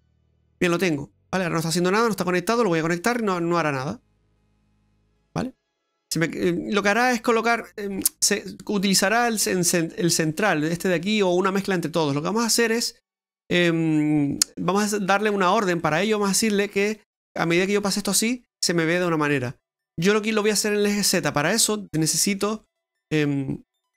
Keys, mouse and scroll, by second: 0.4-0.8 scroll up 1, 0.8 middle click, 2.1 middle click, 2.9 click, 5.7-6.0 scroll down 2, 6.0 middle click, 8.2-8.7 scroll up 3, 8.7 middle click, 12.0 middle click, 15.0-16.0 scroll down 8, 16.0 middle click, 16.1-16.7 scroll up 1, 16.7 click, 17.4 middle click, 20.8 middle click, 22.1 middle click, 23.6 middle click.